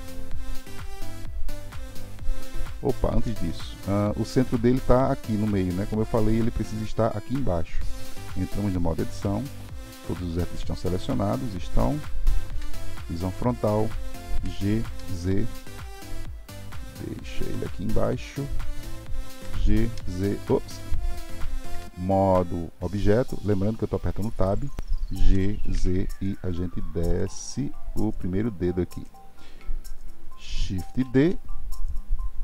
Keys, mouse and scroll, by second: 3.2 ctrl+z, 8.4 Tab, 9.6-12.5 middle drag, 12.5 KP_1, 14.4 g, 31.0 shift+d.